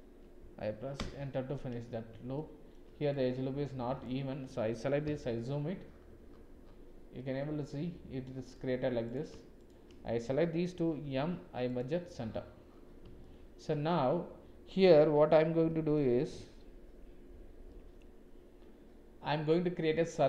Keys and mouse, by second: 2.3 shift+middle click, 3.1 click, 5.0 KP_Decimal, 7.1-8.3 middle drag, 9.0 click, 9.6 shift+click, 11.0 m, 13.2 shift+middle click, 13.9-15.8 middle drag, 15.9 click, 17.7 click.